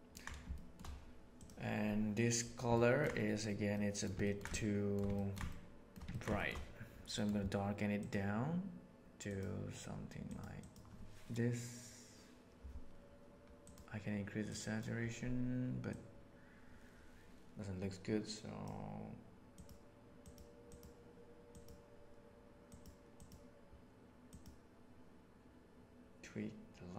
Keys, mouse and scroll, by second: 0.4 shift+middle click, 2.7 ctrl+middle drag, 3.6-4.0 middle drag, 4.2 ctrl+middle click, 4.4-4.9 shift+middle drag, 5.1 ctrl+middle drag, 5.4-5.8 shift+middle drag, 6.0 ctrl+middle click, 6.3 shift+middle click.